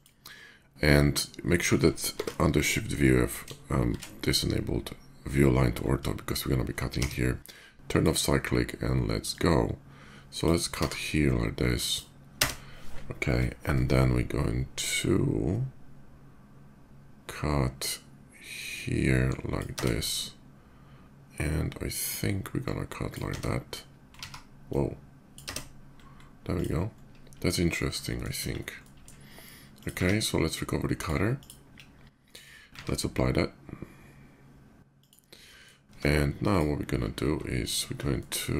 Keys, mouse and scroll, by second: 2.0 shift+v, 3.6 shift+v, 6.6 d, 7.6 click, 9.0-10.2 drag, 10.6 t, 11.6 click, 12.1 space, 18.2-19.3 drag, 19.5 space, 22.1 space, 22.4-22.9 drag, 23.1 space, 24.3 ctrl+z, 24.3-25.1 drag, 25.2 space, 25.7-26.2 middle drag, 26.2 click, 26.5 middle drag, 27.4 middle click, 27.7-28.0 middle drag, 28.1 KP_5, 28.4-28.8 middle drag, 29.4 click, 29.7 q, 30.7 click, 31.2 click, 31.6 /, 32.5 q, 34.6 click, 35.2 middle drag, 35.7 Tab, 36.2 Tab, 36.2 click, 37.4 ctrl+alt+click, 38.0 ctrl+alt+middle click.